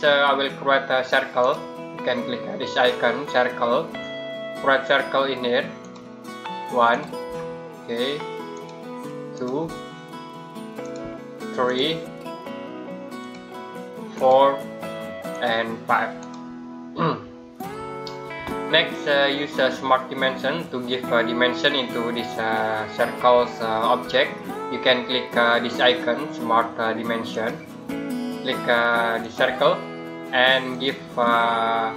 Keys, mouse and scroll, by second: 1.3 click, 5.6 click, 27.1 click.